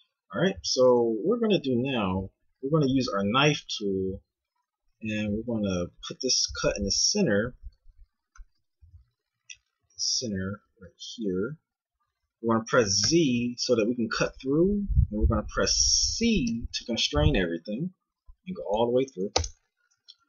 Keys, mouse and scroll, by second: 2.7 k, 8.8 k, 20.1 a.